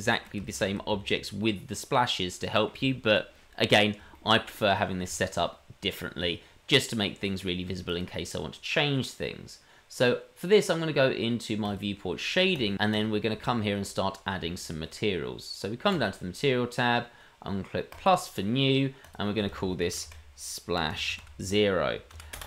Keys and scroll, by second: 0.2 shift+d, 0.8 shift+d, 3.1 shift+d.